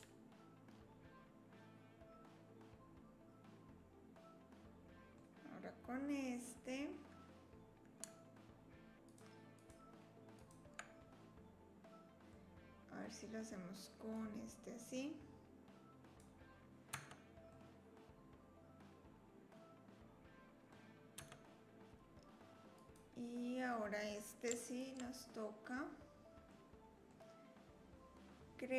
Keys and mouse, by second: 0.9-3.2 middle drag, 3.2-5.1 drag, 9.6 shift+click, 10.4 shift+click, 12.4 click, 14.1-16.2 drag, 17.0 Tab, 17.5-20.7 drag, 21.2 Tab, 22.7 click, 24.7 alt+click, 26.5 click.